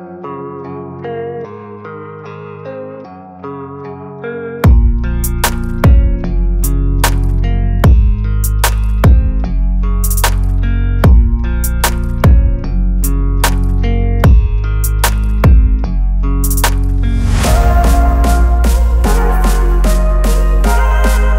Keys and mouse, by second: 0.4-4.7 ctrl+drag, 5.2-7.0 alt+drag, 7.0-10.1 shift+drag, 10.1 click, 10.8 ctrl+z, 11.4-18.0 shift+drag, 19.3 click, 21.1 click.